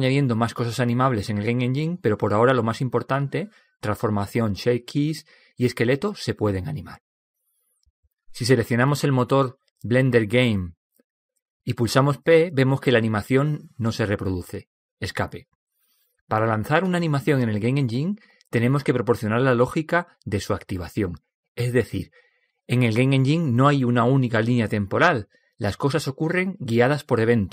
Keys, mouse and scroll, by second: 10.0-11.8 drag, 13.0 p, 15.7 p.